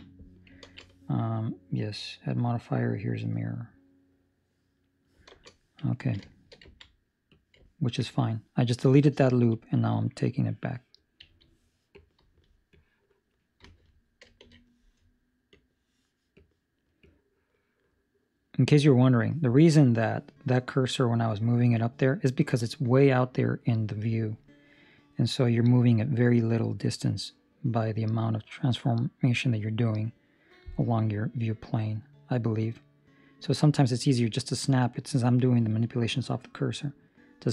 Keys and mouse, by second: 0.6 ctrl+space, 2.5 middle click, 5.9 ctrl+middle click, 6.1 shift+middle click, 7.2 click, 7.6 ctrl+middle click, 9.4 click, 11.9 click, 12.3 Escape, 12.7 click, 13.5 Escape, 14.3 shift+s, 16.3 click, 16.9 click, 18.9 Escape, 25.3 click, 34.3 ctrl+middle click, 34.7 middle click, 35.2 middle click, 35.9 middle click.